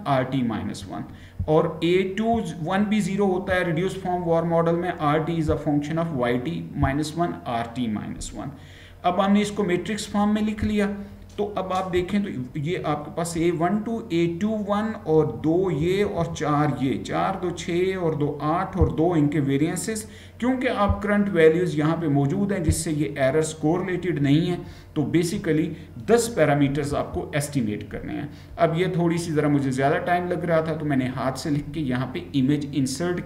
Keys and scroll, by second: 27.0 Right.